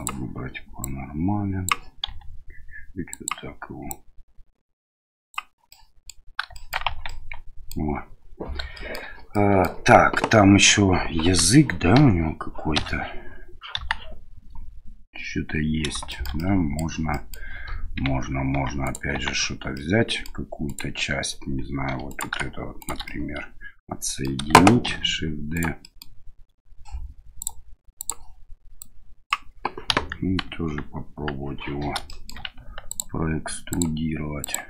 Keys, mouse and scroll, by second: 0.8 click, 2.1 s, 3.9-5.3 drag, 5.8 middle click, 6.6 shift+middle click, 6.9 Tab, 7.0-7.7 middle drag, 8.7 shift+middle drag, 9.4 middle click, 11.9 KP_1, 12.7 KP_Divide, 13.7 KP_1, 16.1 shift+middle drag, 16.4-16.8 middle drag, 17.1 middle click, 18.0 Tab, 18.5 Tab, 18.8 right click, 19.1 Tab, 19.7 middle click, 20.7 right click, 21.9 3, 22.1 right click, 22.8 shift+right click, 23.0-24.3 middle drag, 24.9 shift+d, 25.8 middle click, 27.4 click, 28.9 click, 29.9 KP_1, 30.4 KP_3, 32.1 shift+middle click, 32.9 ctrl+click, 33.8 ctrl+click, 34.4 ctrl+click.